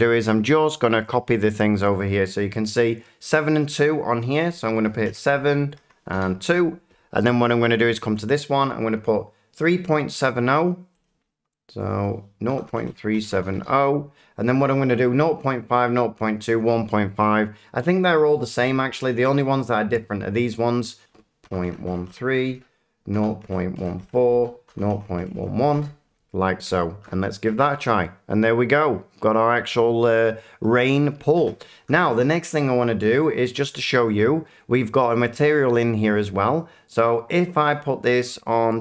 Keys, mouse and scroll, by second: 0.3 shift+middle click, 1.0 shift+middle click, 2.0 click, 3.6 click, 4.3 click, 5.0-6.2 typing, 5.4 Tab, 7.7 click, 11.0 click, 11.8 click, 12.4-13.3 typing, 13.5 Return, 18.1 click, 21.0 click, 21.4-22.1 typing, 22.5 Tab, 23.1-26.2 typing, 24.3 Tab, 27.0-28.5 middle drag, 29.8 middle click, 30.6 middle click, 33.2 click, 33.8 shift+middle click, 34.2 middle click, 37.7 click.